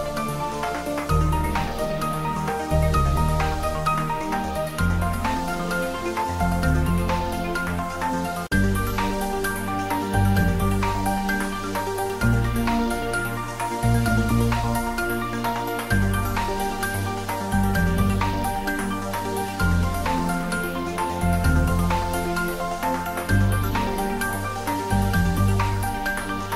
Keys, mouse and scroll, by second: 0.5-0.9 scroll up 1, 1.2 click, 3.0 r, 6.2 click, 6.6 s, 6.9 z, 7.9 z, 8.1 click, 8.3 middle click, 9.1 click, 9.6 r, 10.3 click, 10.5-12.3 middle drag, 12.7 click, 13.5 s, 14.6 x, 15.2 click, 15.5 s, 16.4 y, 17.1 click, 17.2 scroll down 1, 17.4 middle click, 18.2-18.5 scroll up 1, 18.5 click, 19.1 Tab, 19.3 middle click, 19.9 ctrl+r, 20.1 scroll up 1, 22.2 click, 22.8 ctrl+r, 23.1-23.9 scroll up 1, 24.3 click.